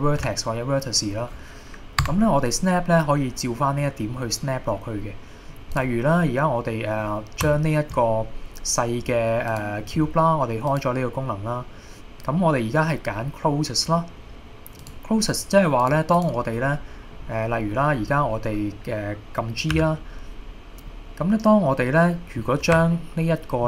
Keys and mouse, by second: 2.1 Tab, 4.5-5.5 middle drag, 5.8-6.3 drag, 6.7 middle click, 7.6-8.0 shift+middle drag, 9.5 click, 10.8-15.0 drag, 15.8 click, 16.2 click, 16.8 middle click, 17.8 middle click, 19.8 g.